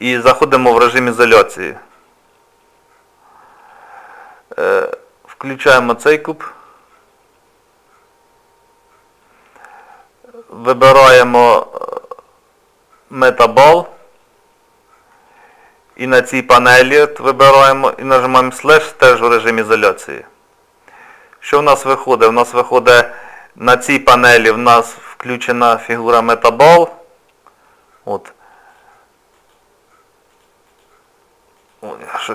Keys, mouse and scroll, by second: 0.0 scroll down 1, 0.6 shift+middle click, 6.1 click, 13.1 click, 15.1 middle click, 18.8 KP_Divide, 20.3 scroll down 1, 21.2 scroll down 1, 21.8 shift+middle click, 23.6 click, 28.7 click.